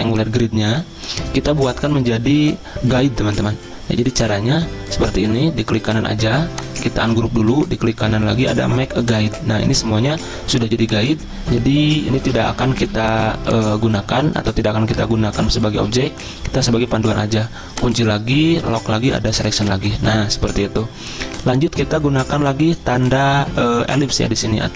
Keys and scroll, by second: 12.2 ctrl+z, 19.6 z.